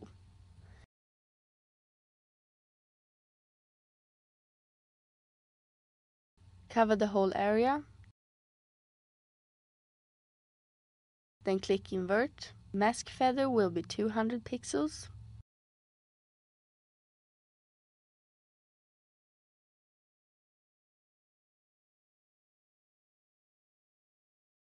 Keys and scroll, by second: 13.6-14.7 typing, 14.9 Return.